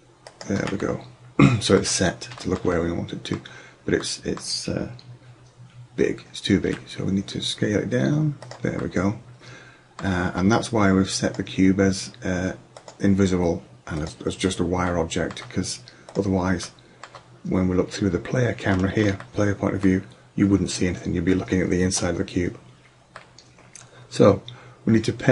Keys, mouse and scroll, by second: 0.5 middle drag, 0.9 middle click, 1.2 middle click, 6.7 s, 8.9 middle drag, 16.9-18.6 middle drag, 18.9-19.6 middle drag, 21.0-23.2 middle drag.